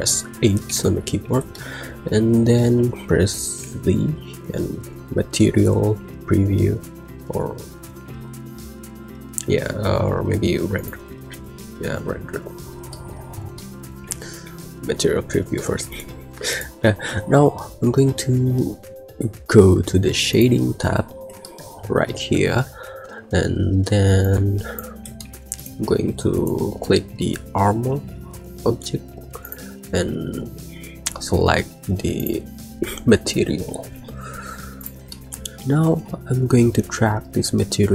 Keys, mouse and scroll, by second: 0.6 h, 1.6 shift+middle click, 3.5 z, 12.9 middle click, 13.4-13.7 middle drag, 13.9 KP_1, 14.3 z, 15.4 shift+middle drag, 15.7 middle click, 16.4 click.